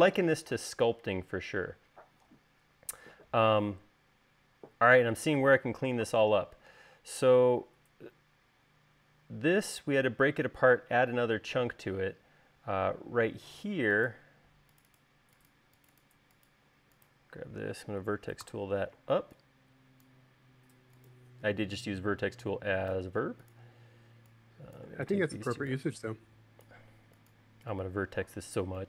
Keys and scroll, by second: 19.1 v.